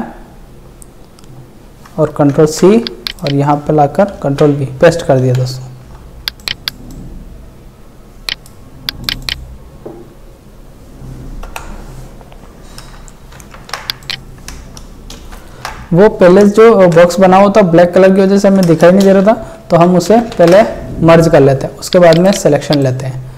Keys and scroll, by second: 2.4 ctrl+c, 4.2 ctrl+v, 5.3 ctrl+t, 11.5 Delete, 13.3 ctrl+shift+e, 15.3 ctrl+shift+e, 16.8 ctrl+d, 19.3 ctrl+shift+e.